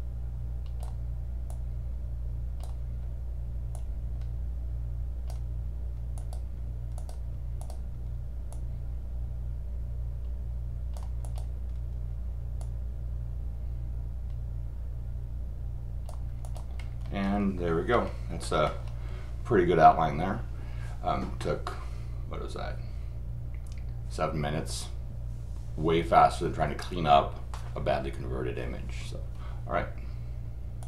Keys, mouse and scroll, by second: 1.5 click, 3.7 click, 6.2 click, 7.0 click, 7.6 click, 8.5 click, 11.2 click, 12.6-16.1 drag, 16.4 click, 16.8-17.3 scroll up 6, 18.6 scroll up 2, 30.8 click.